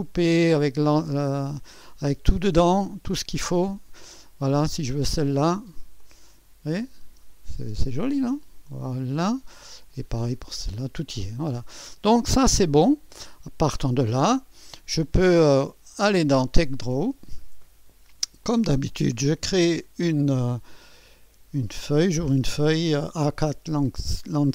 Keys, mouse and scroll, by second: 0.0-0.2 typing, 1.0-2.0 scroll down 1, 2.0 space, 2.7-3.7 drag, 3.4 space, 4.7-5.7 drag, 5.0 space, 6.0-7.5 drag, 7.1 space, 7.5-8.4 scroll up 1, 7.7 space, 8.2-9.7 drag, 9.1 space, 9.9 click, 10.3 space, 10.8-11.8 scroll down 1, 11.6 click, 11.8-13.0 typing, 12.5 click, 12.8 click, 15.6 click, 16.9 click, 18.4-19.5 drag, 19.6-21.1 scroll down 1.